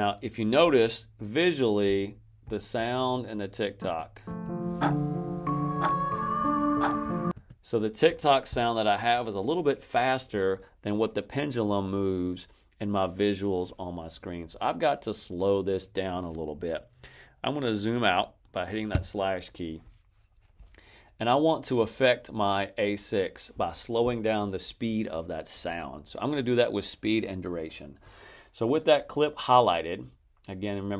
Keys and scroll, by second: 4.1 space, 7.2 space, 18.8 \.